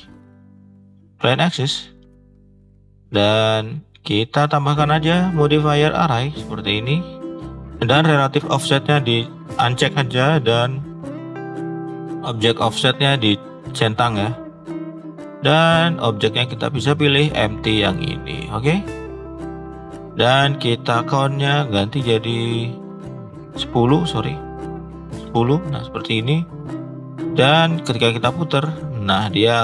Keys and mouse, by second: 1.8 shift+middle click, 3.1 click, 3.4 shift+middle click, 5.2-6.2 drag, 6.9 shift+middle click, 8.4 click, 11.2 click, 12.2 click, 15.1 click, 20.9-25.9 drag, 28.2 r.